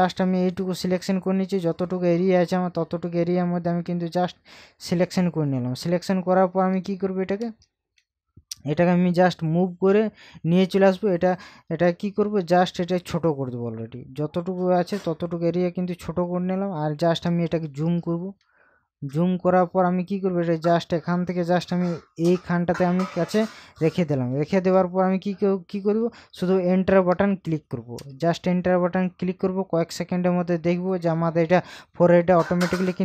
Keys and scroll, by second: 6.1 ctrl+KP_Subtract, 7.4 ctrl+KP_Add, 17.5 ctrl+KP_Add, 24.7 ctrl+KP_Subtract, 28.0 Return.